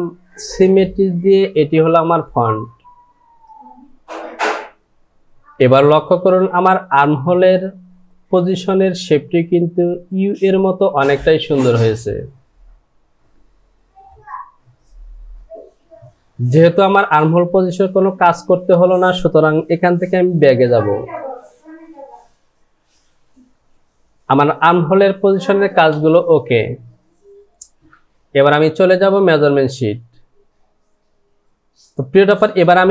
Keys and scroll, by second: 21.0 ctrl+z, 21.7 ctrl+z, 22.8 ctrl+z, 24.3 Home.